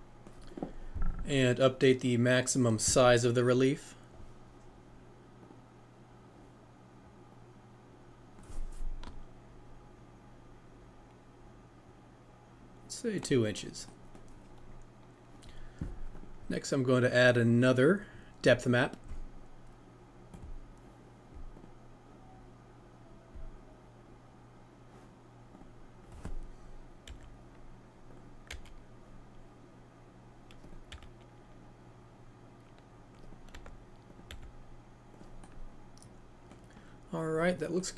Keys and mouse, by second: 3.4 click, 7.5-13.1 drag, 16.1 click, 17.1 click, 20.4 click, 28.1-37.9 drag.